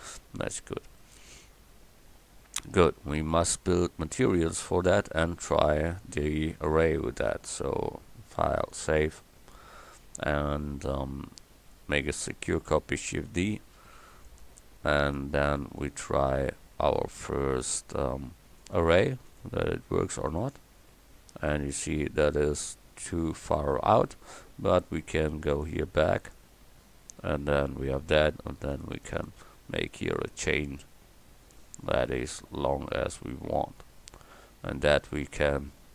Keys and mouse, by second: 2.8 Tab, 11.5 middle click, 13.1 shift+d, 29.7-34.2 drag.